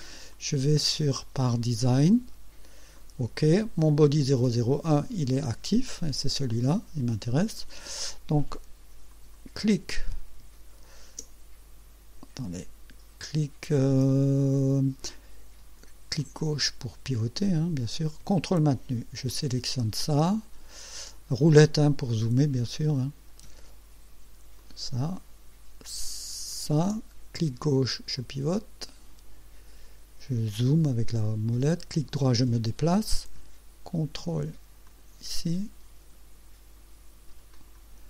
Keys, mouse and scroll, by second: 0.4 click, 1.5 click, 3.0 click, 6.6 click, 7.6 click, 9.2 click, 11.3-11.8 ctrl+scroll up 4, 15.1 right click, 16.2-18.1 drag, 19.4 ctrl+click, 20.1-20.4 ctrl+scroll down 1, 22.7-23.6 right drag, 24.6 ctrl+click, 26.6 ctrl+click, 27.4-30.0 drag, 30.2-30.8 scroll down 4, 31.3-32.6 right drag, 34.9 ctrl+click, 37.6 ctrl+click.